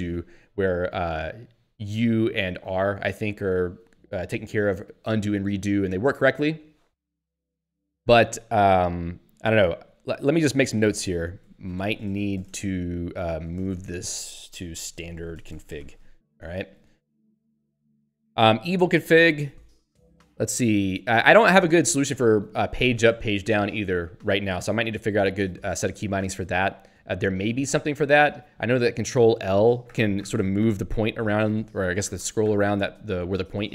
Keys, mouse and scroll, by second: 9.8 Up, 10.3 Return, 10.6-16.4 typing, 16.7 Delete, 17.0 Right, 17.4 Delete, 17.9 ctrl+s, 18.4 Down, 29.9 ctrl+l.